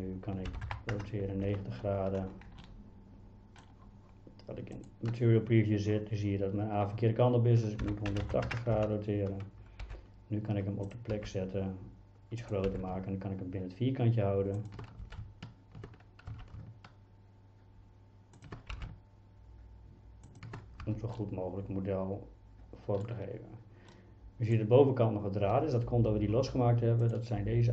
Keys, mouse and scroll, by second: 0.5 r, 0.7 KP_9, 1.0 KP_0, 1.5 KP_Enter, 2.6-3.6 middle drag, 7.8 r, 8.1 KP_1, 8.3 KP_8, 8.5 KP_0, 8.8 KP_Enter, 9.9 g, 11.2 s, 12.4 click, 12.7 g, 15.0 d, 16.3 s, 18.7 g, 20.3 click, 20.9 Tab, 21.2-23.1 middle drag, 23.9-24.6 middle drag, 25.5 Tab, 27.0 click.